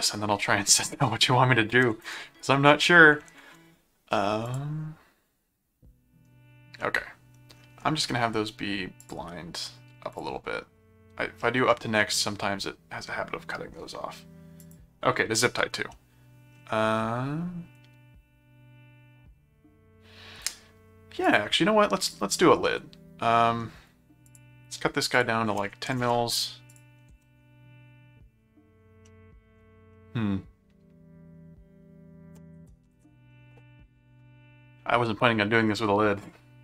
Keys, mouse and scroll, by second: 4.5 click, 6.8 middle click, 9.0 click, 10.1 click, 11.4 middle click, 14.6 click, 15.9 middle click, 21.2 click, 22.0 click, 22.6 middle click, 24.2 click, 25.1 click, 26.7 ctrl+click, 27.1 ctrl+Tab, 29.0 middle click, 29.9-33.3 middle drag.